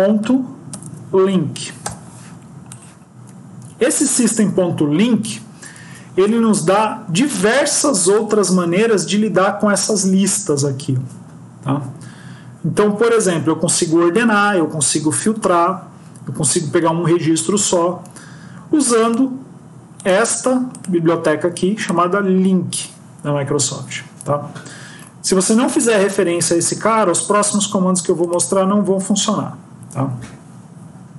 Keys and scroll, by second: 5.8 ctrl+s.